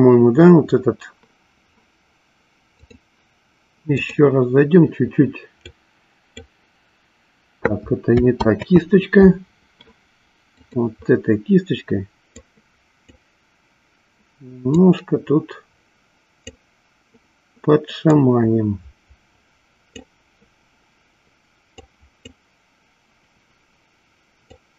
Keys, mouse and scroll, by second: 2.6-4.9 drag, 6.6 click, 9.5 ctrl+z, 10.7 click, 13.0 click, 15.4-17.3 drag, 18.9-20.8 drag, 22.5 click.